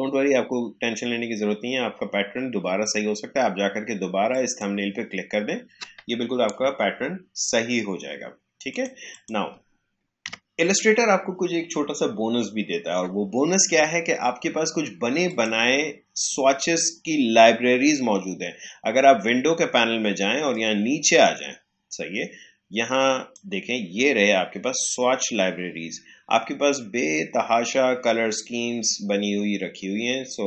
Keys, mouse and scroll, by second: 4.2 click, 10.2 Delete, 15.2 click, 20.4-30.4 drag.